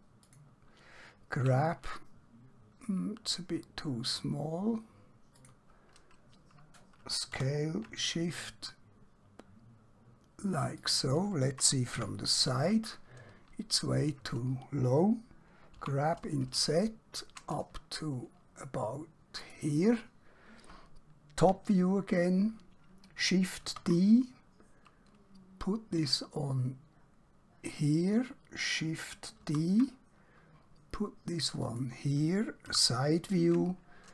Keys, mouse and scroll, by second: 0.3 click, 1.4 g, 5.4 click, 7.4 s, 10.9 shift+click, 11.9 KP_1, 15.8 g, 18.7 typing, 19.5 click, 21.4 KP_7, 27.8 click, 29.5 shift+d, 31.7 click, 32.6 KP_1.